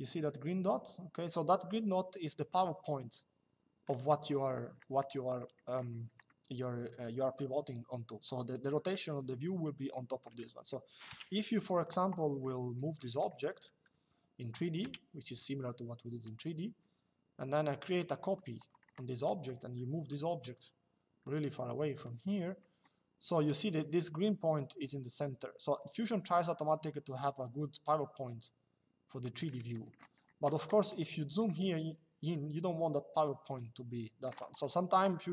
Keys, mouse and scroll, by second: 3.8 middle click, 4.8 shift+middle click, 5.9 shift+middle click, 10.1 middle click, 10.8-11.5 scroll, 11.5 click, 12.7 middle click, 13.6 Escape, 14.5-15.5 scroll, 15.9 click, 17.9 click, 20.2 click, 21.7 click, 22.2 middle click, 22.6 middle click, 29.5 middle click, 31.1 middle click, 35.2 middle click.